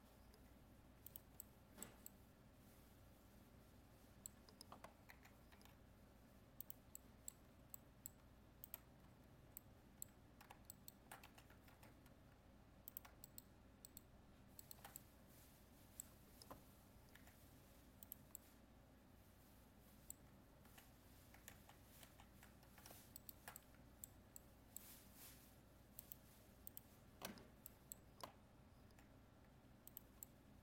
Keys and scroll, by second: 11.7 ctrl+Tab, 21.5 ctrl+z.